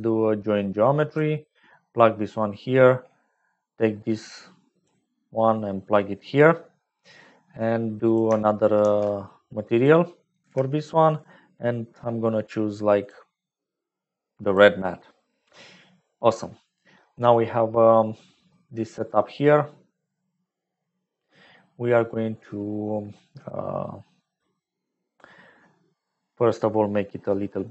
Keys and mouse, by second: 2.4 click, 4.8 click, 6.8 click, 8.8 shift+d, 10.3 g, 13.0-14.7 drag, 15.9 middle click, 26.0 middle click, 26.9 middle click.